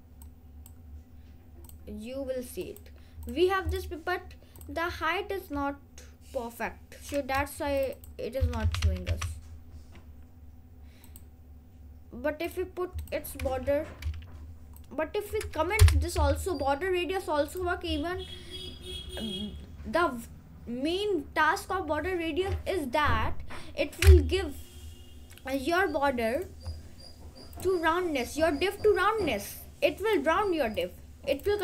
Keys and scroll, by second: 8.6-9.8 typing.